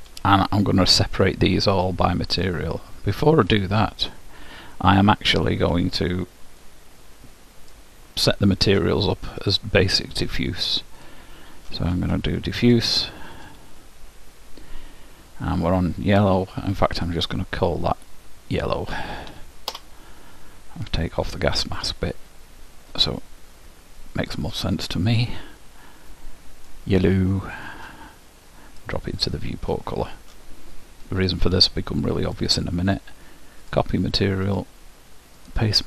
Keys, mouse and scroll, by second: 1.3-4.7 middle drag, 6.7-8.7 drag, 9.5-11.3 drag, 12.8-15.3 drag, 17.0-18.6 drag, 18.7 click, 25.2-27.2 drag, 27.8-29.5 drag, 32.4-34.1 drag, 34.6-35.8 drag.